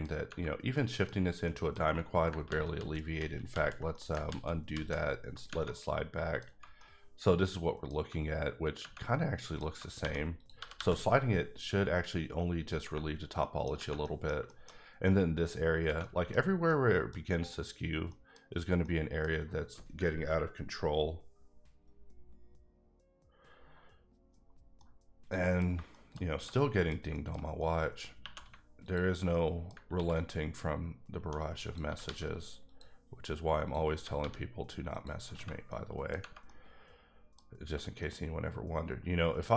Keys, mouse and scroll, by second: 0.7 middle click, 1.4 middle click, 2.5 ctrl+z, 2.7 ctrl+z, 3.4 ctrl+z, 3.5 ctrl+z, 3.9 middle click, 4.3 ctrl+z, 5.7 middle click, 6.8 middle click, 8.4-8.8 scroll up 1, 9.1 middle click, 10.0 1, 10.4 click, 10.5 g, 10.7 g, 12.6 click, 13.1-13.4 scroll down 2, 13.4 middle click, 14.0 middle click, 14.7 scroll up 1, 16.0 middle click, 16.7 middle click, 17.8 scroll down 2, 17.9 scroll up 1, 18.1 middle click, 18.8 middle click, 24.8 middle click, 25.9 shift+middle click, 26.4 middle click, 28.1 scroll down 1, 28.2 2, 28.8 alt+click, 29.3 middle click, 29.9 ctrl+x, 30.3-31.2 scroll up 2, 31.2 1, 31.6 click, 31.8 g, 32.0 g, 32.7 click, 33.8 click, 33.9 g, 34.1 g, 34.9 click, 35.4 scroll down 1, 35.7 middle click, 36.4 middle click, 38.0 middle click, 39.4-39.5 scroll down 2.